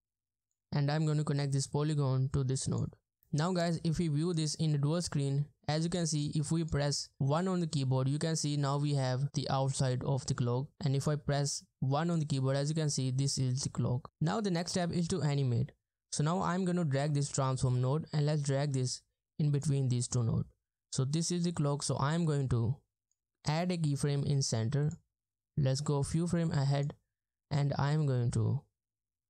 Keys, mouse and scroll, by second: 5.3-6.0 ctrl+scroll down 1.